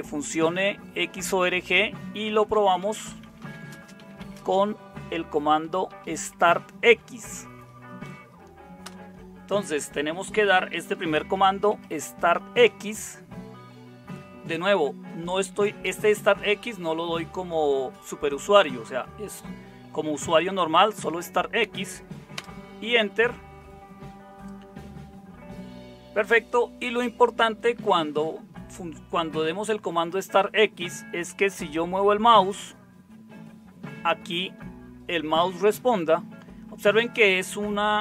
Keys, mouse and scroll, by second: 2.3-7.3 typing, 8.8 Return, 10.7-12.5 typing, 22.3 Return.